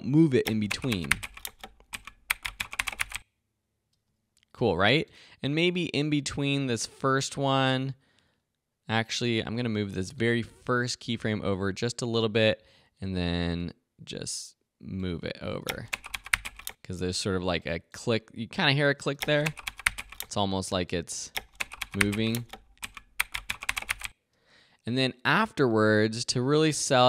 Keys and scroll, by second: 0.4 space, 3.9 space, 15.6 space, 19.1 space, 24.3 space.